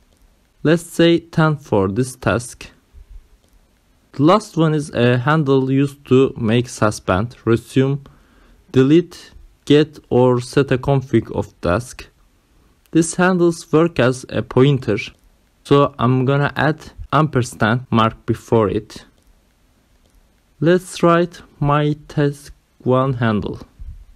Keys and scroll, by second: 1.6 1, 3.0 space, 4.8 ,, 5.5 space, 17.2 shift+6, 18.7-24.1 typing.